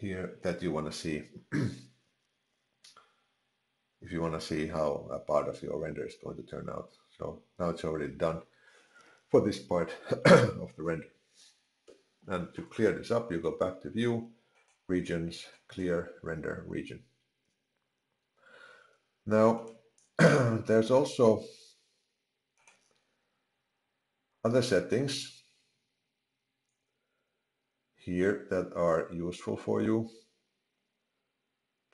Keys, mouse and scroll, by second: 13.3 click, 19.6 click, 22.6 click, 23.8-24.4 scroll down 4, 24.4-24.8 scroll down 5, 25.5-26.2 scroll down 5, 29.7-30.3 scroll up 1, 30.3-31.9 scroll up 26.